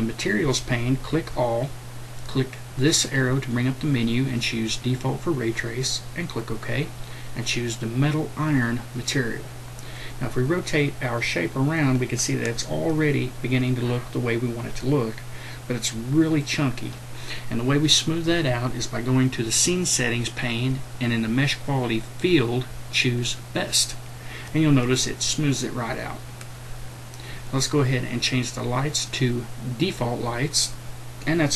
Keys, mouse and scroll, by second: 1.2-27.3 drag.